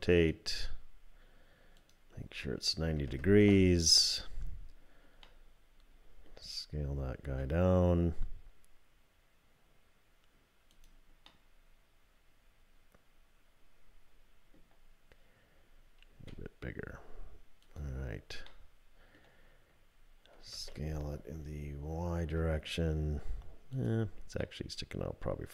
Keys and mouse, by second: 1.9-4.2 drag, 5.3 middle click, 6.0 click, 7.3 s, 11.3-14.6 drag, 16.1 s, 18.5 click, 20.5 s, 24.4-25.5 middle drag.